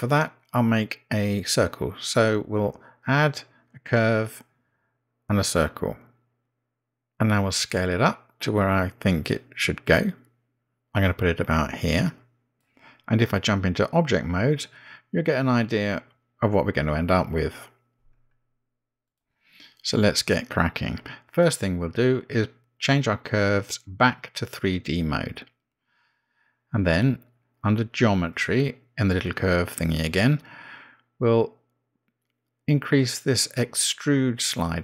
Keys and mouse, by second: 1.9-6.6 drag, 9.1 s, 15.8 click, 18.4 Tab, 21.0 Tab, 26.2 click, 31.1 click, 33.8-34.8 drag.